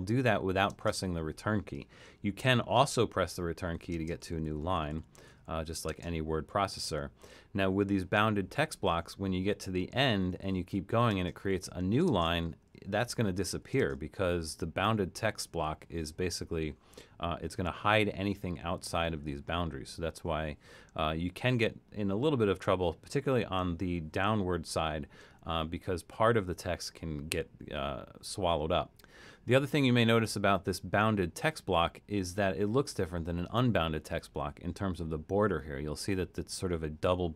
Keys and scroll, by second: 0.7-1.5 typing, 2.4 Return, 3.4-5.9 typing, 10.0-14.0 typing.